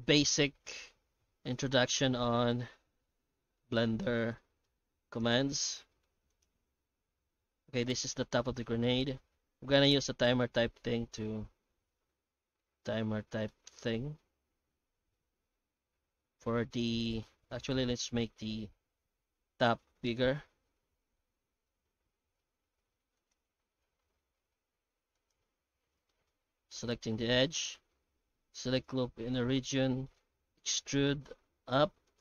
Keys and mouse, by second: 0.8-3.6 middle drag, 4.4 middle drag, 5.1 right click, 5.3 Tab, 5.9 shift+middle click, 6.1 Tab, 6.3 right click, 6.5 Tab, 6.8-7.9 middle drag, 8.6 shift+middle click, 9.0 Tab, 10.2 Tab, 11.6-13.5 shift+middle drag, 14.3-16.8 middle drag, 17.0 middle click, 17.5 ctrl+z, 17.7 ctrl+z, 17.8 ctrl+z, 18.0 ctrl+z, 18.1 ctrl+z, 18.3 ctrl+z, 18.5 ctrl+z, 18.7 ctrl+z, 19.0 ctrl+z, 19.2 ctrl+z, 19.7 ctrl+z, 20.1 ctrl+z, 21.8 alt+a, 25.2 alt+shift+right click, 25.9 2, 26.1 middle click, 26.6 alt+a, 27.2 alt+shift+right click, 27.7 q, 29.5 middle click, 29.9 shift+middle click, 30.4 e.